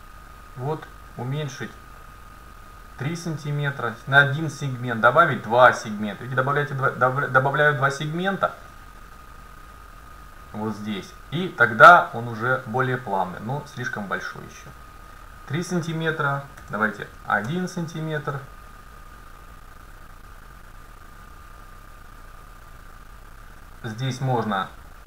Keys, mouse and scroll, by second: 5.0-7.2 drag, 5.9-8.7 middle drag, 8.7-9.8 scroll down 1, 10.2 scroll up 1, 14.7-16.5 drag, 20.4-22.1 drag.